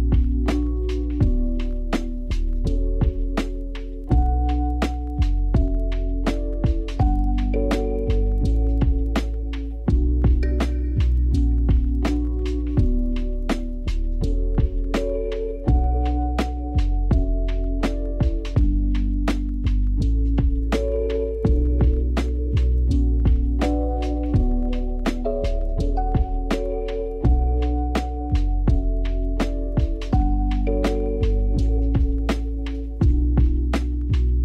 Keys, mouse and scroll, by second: 7.1 g, 9.0-9.9 scroll up 5, 9.9 r, 12.1-12.4 scroll up 2, 12.4 s, 14.9 click, 16.2 shift+click, 17.1 s, 29.2 click, 32.5-34.1 scroll up 1, 34.1-34.4 scroll down 5.